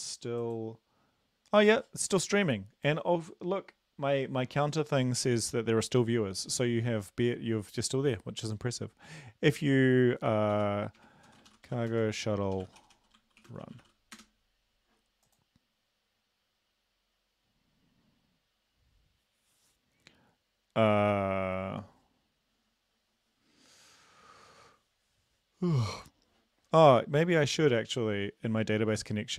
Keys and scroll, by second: 10.5-14.1 typing.